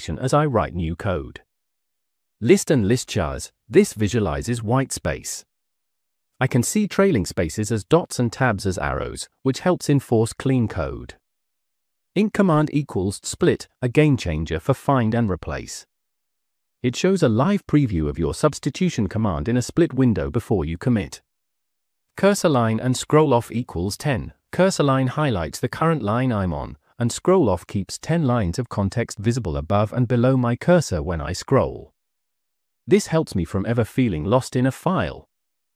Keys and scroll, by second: 1.4 Escape, 1.5-2.8 typing, 3.8 shift+v, 4.8 j, 9.9 Escape, 10.4 j, 10.5 j, 10.7 j, 12.5 l, 14.1 l, 14.7 l, 14.8 l, 19.8 j, 20.0 j, 20.3 j, 23.2 k, 23.5 j, 24.4 k, 30.7-32.7 typing.